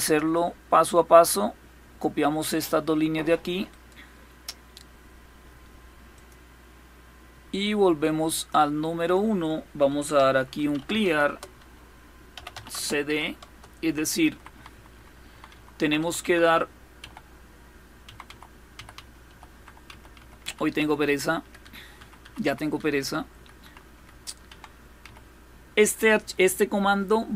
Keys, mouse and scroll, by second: 0.0-1.7 drag, 3.3 click, 3.3-4.4 right drag, 5.8 click, 8.0 click, 9.5-12.5 typing, 13.1 Return, 13.9 Up, 14.2 Up, 14.4 Up, 14.6 Up, 14.9 Up, 15.2 Up, 15.4 Up, 15.7 Up, 15.9 Up, 16.1 Up, 16.6 Down, 17.7 Up, 17.9 Up, 18.4 Up, 18.6 Up, 18.9 Up, 19.2 Up, 19.5 Up, 19.8 Up, 20.1 Up, 20.4 Up, 20.7 Up, 21.0 Up, 21.3 Up, 21.6 Up, 21.8 Up, 21.9-24.7 typing.